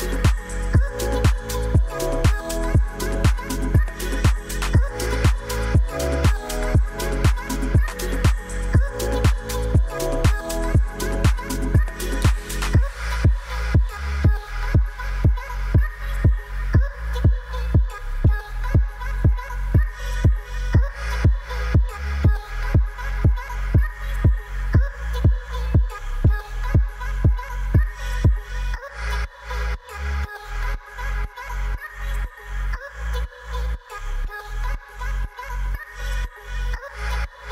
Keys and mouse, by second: 2.4-3.9 drag, 6.0 click, 8.5-9.0 middle drag, 10.3 shift+click, 10.6 shift+click, 11.0 shift+click, 11.7 KP_Divide, 12.5 middle drag, 13.3 shift+middle drag, 13.5 Tab, 13.8 middle click, 14.6 middle click, 15.9-18.3 drag, 18.7 click, 19.1 Tab, 19.7 shift+middle drag, 19.9 Tab, 21.5 click, 22.0-23.8 drag, 24.1 click, 24.5 shift+middle click, 24.7 Tab, 25.0 click, 25.4 Tab, 26.3 click, 27.0-28.3 drag, 28.9 click, 29.3 Tab, 29.5 click, 29.9 Tab, 30.7-32.4 drag, 32.9 click, 33.3 Tab, 33.6 click, 35.1-36.3 drag, 36.6 Tab.